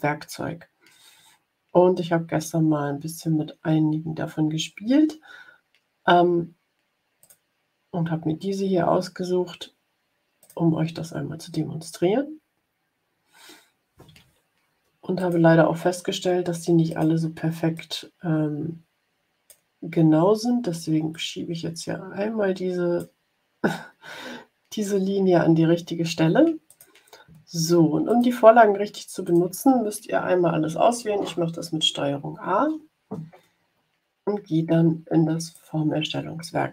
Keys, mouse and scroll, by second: 7.1 click, 10.3 click, 15.1 click, 16.8 click, 17.6-19.6 drag, 21.0-23.1 drag, 26.6 click, 28.0 click, 29.2 click, 32.4 ctrl+a, 35.4 click.